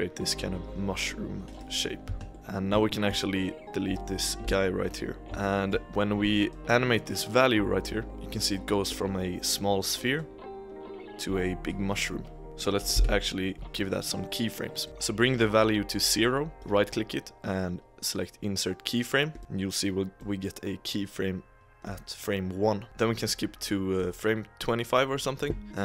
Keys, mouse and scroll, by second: 1.9 scroll down 1, 2.0 Tab, 2.3 middle click, 2.8-3.2 shift+middle drag, 3.2-3.5 scroll up 1, 4.0-4.4 middle drag, 4.4 x, 5.2-6.4 shift+middle drag, 6.4-8.9 drag, 10.1-12.9 drag, 12.9 KP_1, 14.8-15.7 drag, 16.5-19.4 right drag, 20.1 click.